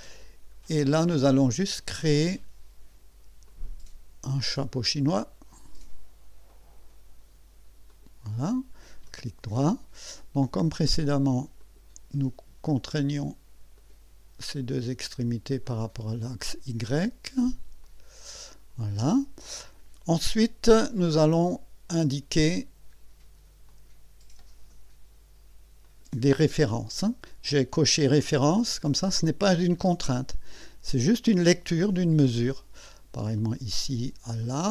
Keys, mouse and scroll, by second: 0.2 scroll up 2, 1.8 click, 3.5 click, 6.5 click, 7.9 click, 9.0 right click, 9.9 right click, 11.6 click, 13.8 click, 15.6 click, 17.8 click, 19.9 scroll down 1, 20.4 scroll up 2, 22.1 click, 23.7 click, 25.8 click, 29.0 click, 33.3 click, 34.4 click.